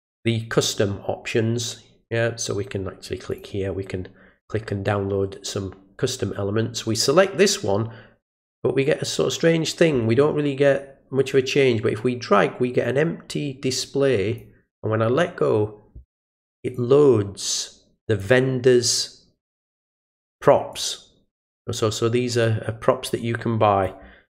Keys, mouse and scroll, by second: 3.3 click, 11.3-14.4 drag, 16.7-18.2 drag, 20.7 click, 22.4-23.8 drag.